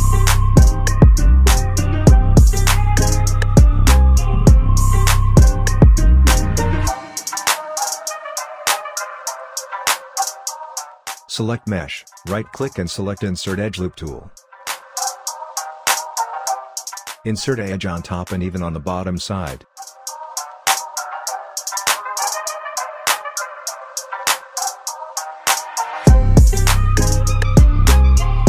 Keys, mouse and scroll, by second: 0.8-2.0 scroll down 1, 2.0 4, 3.0 click, 3.7 5, 4.3-4.6 scroll down 1, 4.8 alt+click, 5.5 alt+middle click, 6.4 alt+click, 7.6 space, 8.7-9.4 scroll up 1, 9.8 click, 10.7 alt+middle click, 11.5 click, 12.6-14.9 shift+right drag, 14.9-24.6 drag, 24.6-27.9 right drag, 27.9 w.